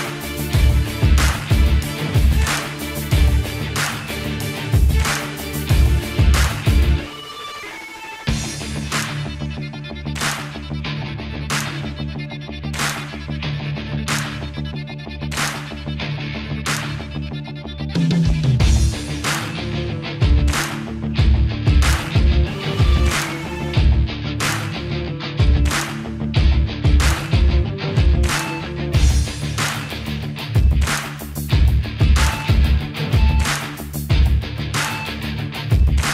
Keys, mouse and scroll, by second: 4.6 click, 8.2 ctrl+a, 8.9 click, 10.3 click, 21.4 click, 24.1 a, 24.9 click, 27.3 click, 35.9 click.